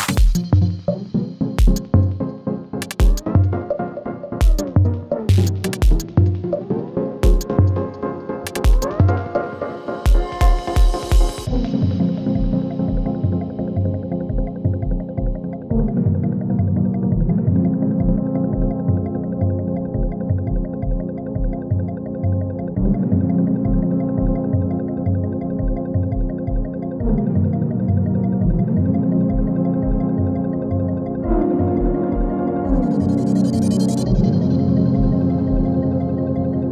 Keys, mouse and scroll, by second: 1.1-2.6 alt+drag, 2.6 space, 3.6 click, 4.3 space, 6.1 click, 6.7 u, 8.4-11.1 drag, 15.2 ctrl+c, 15.6 click, 17.1 ctrl+v, 18.0 click, 18.5 ctrl+v, 19.3 u, 20.1 click, 20.3 u, 21.0 space, 24.1 click, 26.9 ctrl+v, 27.3 u, 27.9 space, 30.9 click, 31.2 u, 31.9 click, 32.4 space, 35.2-36.7 drag.